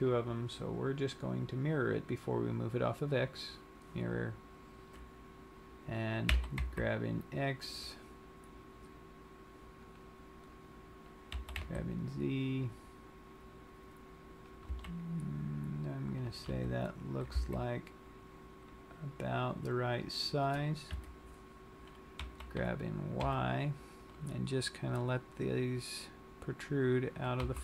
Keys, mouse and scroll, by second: 6.5 g, 10.3 click, 10.6-11.1 scroll, 12.0 g, 14.8 click, 15.1 s, 16.6 click, 17.1 g, 20.5 click, 24.6 g.